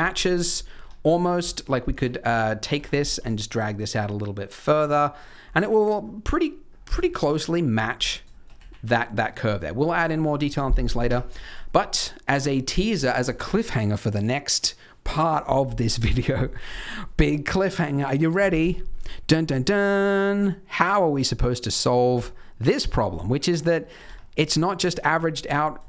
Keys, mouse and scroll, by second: 0.0 right click, 0.0 scroll down 1, 0.0 KP_3, 0.1-0.8 scroll up 6, 0.7 Tab, 1.0 z, 1.5 shift+middle click, 1.9 alt+a, 2.2 c, 2.9 scroll down 1, 3.1 g, 4.8 Tab, 5.0 scroll down 1, 5.3-6.0 scroll up 1, 6.0 scroll down 2, 6.1-6.6 scroll down 1, 6.6-7.0 scroll down 2, 7.0 shift+middle click, 7.7-8.0 scroll up 4, 8.0 Tab, 8.3 shift+middle click, 8.5 z, 8.8 middle click, 9.3-9.7 scroll down 2, 10.8 scroll up 2, 11.1 Tab, 11.3 shift+middle click, 11.6 scroll up 2, 11.8 middle click, 15.9 middle click, 16.3 shift+middle click, 16.7-18.6 scroll up 1, 18.6 scroll down 1, 18.8 middle click, 18.8 scroll down 1, 19.3 middle click, 19.7 scroll up 2, 20.1 middle click, 21.9 scroll down 2, 22.1 middle click, 22.8 scroll up 2, 23.1 middle click, 24.0 Tab, 24.3 middle click, 24.5 scroll down 2, 25.1 click, 25.4-25.8 scroll down 2.